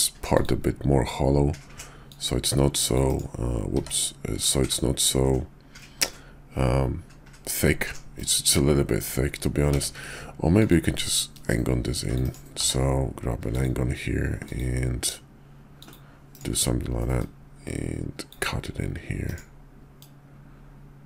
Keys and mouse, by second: 1.9-3.2 drag, 3.7 d, 9.6 d, 11.2-12.1 drag, 12.6 d, 17.2-18.3 drag, 20.0-21.0 drag.